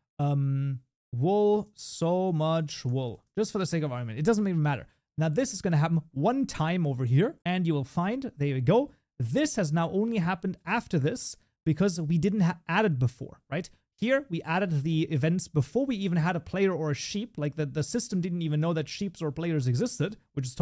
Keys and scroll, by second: 3.8 ctrl+s, 7.4 shift+F10.